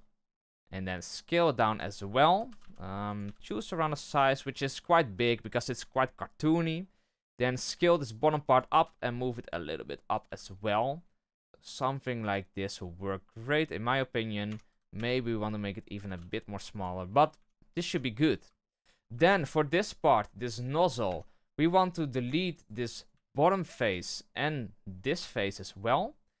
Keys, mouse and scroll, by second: 4.8-5.2 shift+middle drag, 5.2-5.7 scroll up 1, 5.7 Tab, 6.9 alt+right click, 7.6 s, 12.7-13.8 scroll down 2, 13.8-14.4 scroll up 1, 14.4 Tab, 14.9 s, 17.3 Tab, 17.8 Tab, 18.5-19.1 shift+middle drag, 19.1 shift+h, 19.3-19.7 middle drag, 19.7-20.2 scroll up 1, 21.0 Tab, 21.3-22.5 scroll up 1, 22.5 click, 22.9 right click, 23.0 x, 24.3 right click, 24.5 middle click, 25.1 x, 26.0-26.4 scroll down 1.